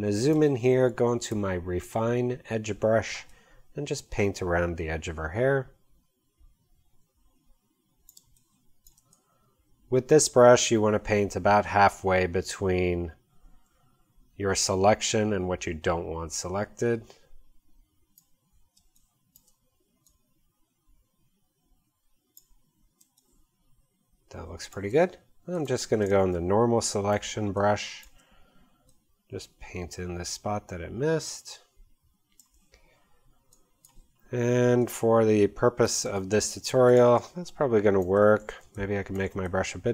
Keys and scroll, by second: 8.2 space, 18.8 space, 23.0 space, 26.0 space.